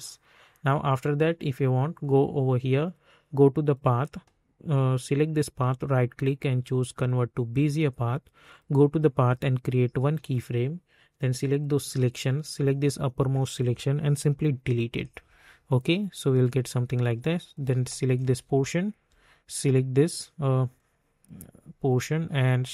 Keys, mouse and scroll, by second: 2.2 click, 5.6 right click, 6.9-18.6 drag, 18.6 alt+scroll up 1, 19.6-22.7 drag.